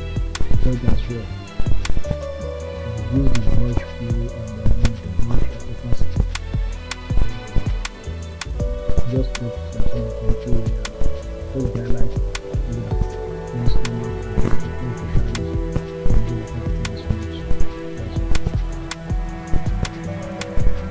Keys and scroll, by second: 7.6 ], 8.7 [, 11.7 [, 13.9 ctrl+z, 15.5 [.